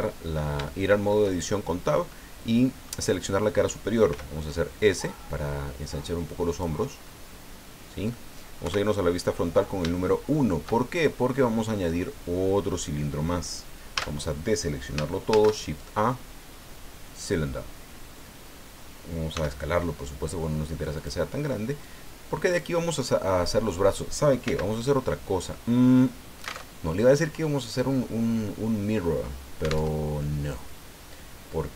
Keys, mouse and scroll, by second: 0.3-0.6 scroll up 1, 0.6 shift+middle click, 2.1 middle click, 4.1 s, 6.5 click, 7.0-8.3 middle drag, 8.6 KP_1, 10.0 shift+click, 13.9 a, 15.3 shift+a, 17.1 click, 18.4-18.7 scroll down 1, 19.3 s, 20.9 click, 21.8 click, 24.4 x, 26.6 alt+Tab, 29.9 alt+Tab.